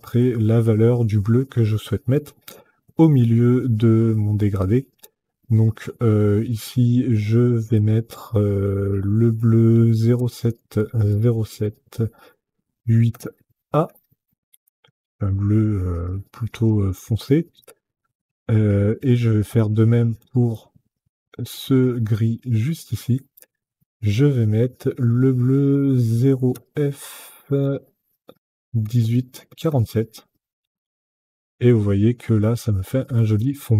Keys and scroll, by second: 9.8 KP_0, 10.2 KP_7, 10.5 KP_0, 10.8 KP_7, 12.8 KP_8, 13.5 a, 14.5 Tab, 26.2 KP_0, 27.3 f, 28.5 KP_1, 28.8 KP_8, 29.2 KP_4, 29.5 KP_7, 30.5 Tab.